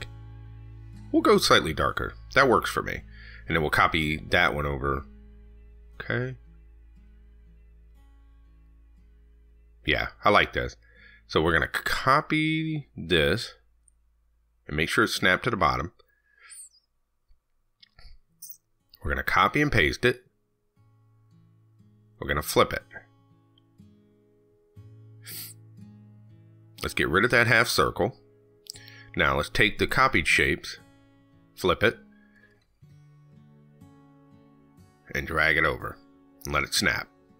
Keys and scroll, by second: 19.6 ctrl+c, 19.8 ctrl+v, 24.0 ctrl+z.